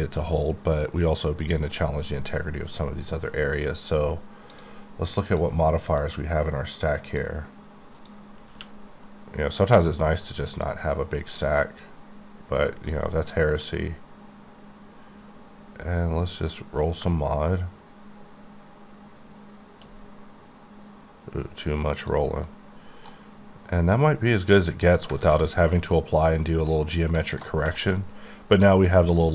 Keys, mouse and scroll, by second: 1.8-2.5 scroll down 1, 2.5-3.7 scroll down 2, 3.7-4.5 scroll down 1, 4.5 click, 5.2 click, 6.0 click, 6.1 click, 7.0 click, 7.9 click, 8.5 q, 10.6 click, 15.9 scroll up 1, 17.0-17.6 shift+scroll up 1, 18.2-18.5 shift+scroll up 2, 19.9-20.3 scroll up 4, 20.8 scroll down 2, 22.0 click, 22.3-23.0 scroll down 3, 23.1 middle click, 24.8 scroll down 1, 25.2 a, 25.9 middle click, 26.7 middle click, 27.4-28.9 scroll down 4, 27.7 shift+middle click, 28.9 middle click.